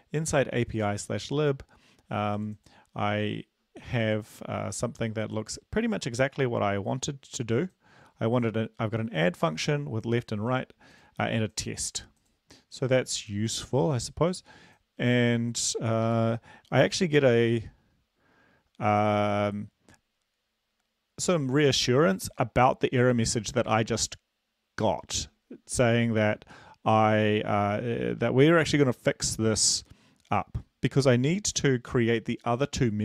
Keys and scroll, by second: 16.3 super+Left.